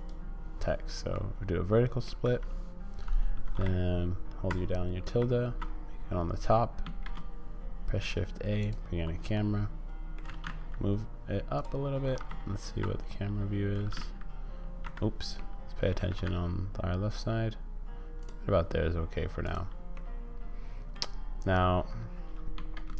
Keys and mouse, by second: 1.1 middle click, 5.1 `, 6.8 shift+a, 9.3 middle click, 10.2 g, 13.7 g, 15.4 click, 16.0 g, 19.4 click, 20.1 middle click, 22.5 shift+a.